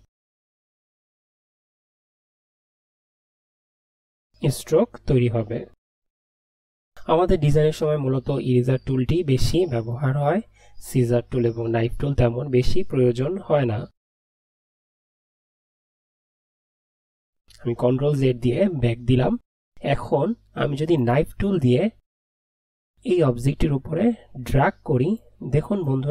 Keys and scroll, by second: 16.2 ctrl+z.